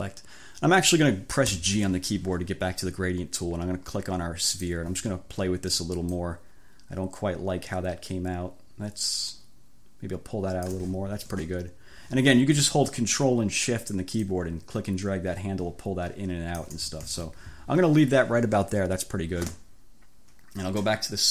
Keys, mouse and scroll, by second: 1.6 g, 4.6 click, 6.2-11.0 ctrl+shift+middle drag, 14.3-16.9 ctrl+shift+middle drag, 17.2 ctrl+shift+z.